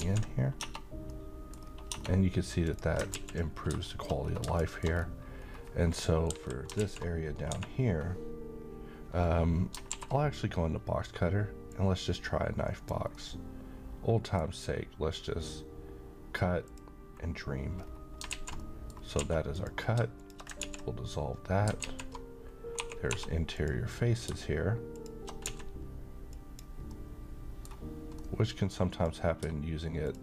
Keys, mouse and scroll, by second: 0.0 ctrl+x, 0.6 Tab, 0.9 scroll down 1, 1.1-1.7 middle click, 1.6 scroll up 1, 2.6 click, 3.1 x, 3.5 scroll down 1, 3.8 shift+middle click, 4.2 scroll down 1, 4.5 middle click, 4.9-6.3 scroll down 1, 6.8-7.5 typing, 9.9 alt+w, 11.7-12.9 drag, 13.1-14.4 middle drag, 16.6 click, 17.8-18.2 scroll up 1, 18.3 z, 18.6 middle click, 19.2 a, 19.5 click, 20.6 ctrl+x, 21.8 alt+z, 22.8-23.1 typing, 23.5 click, 24.9 shift+click, 25.4 x, 26.3 click, 26.9-27.8 middle drag, 28.9 click, 30.0 shift+click.